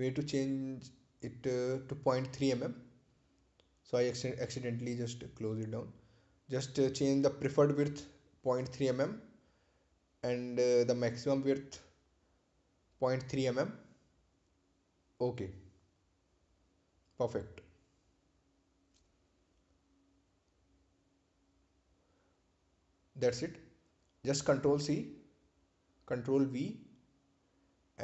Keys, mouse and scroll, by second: 2.4 click, 6.3-8.6 typing, 9.3 click, 10.8-13.3 typing, 14.6 click, 15.8-18.4 typing, 20.5 click, 26.2 click.